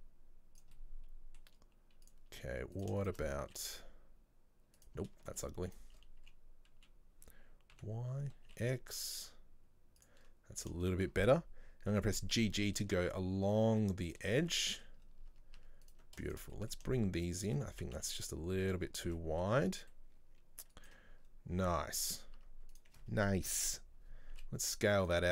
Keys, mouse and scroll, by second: 0.8-2.1 middle drag, 2.1 click, 2.8 right click, 3.1 shift+right click, 3.5 s, 5.4 shift+right click, 5.7 shift+right click, 6.3 s, 10.6 right click, 10.9 shift+right click, 12.0 g, 14.4 scroll down 2, 14.5 middle click, 15.0-15.4 scroll up 1, 15.4 Tab, 15.6 Tab, 15.9 right click, 16.3 shift+right click, 16.6 middle click, 17.3 shift+right click, 17.8 s, 19.0 scroll down 1, 19.1 Tab, 19.2 middle click, 19.6-20.0 scroll up 1, 20.0-21.3 middle drag, 21.3-21.8 scroll down 6, 21.8 middle click, 22.2 scroll up 1, 22.4 Tab, 22.8 right click, 23.5 ctrl+l, 24.4 s.